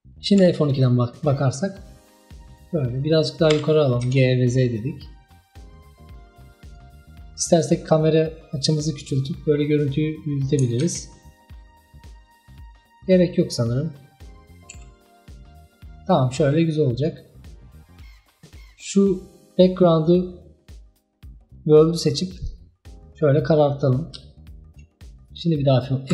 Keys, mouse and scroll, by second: 2.6 F12, 3.6 g, 7.6 click, 8.6-10.9 drag, 10.9 ctrl+z, 12.5-13.6 drag, 17.0 F12, 18.6 click, 22.4 click, 24.2 z.